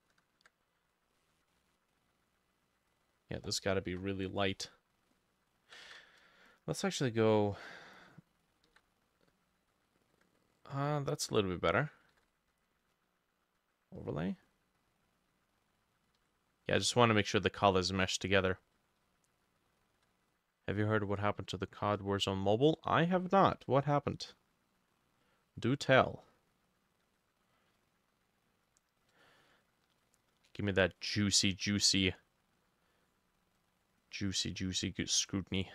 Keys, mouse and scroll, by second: 3.9 Delete, 4.5 middle click, 5.9 ctrl+z, 8.6 ctrl+middle click, 8.7 ctrl+z, 12.1 ctrl+middle click, 12.2 ctrl+z, 16.2 ctrl+middle click, 16.2 ctrl+z, 19.1-20.3 shift+middle drag, 19.6 shift+click, 27.1 double click, 29.3 middle click, 31.0 middle click, 33.1 double click, 35.3 double click.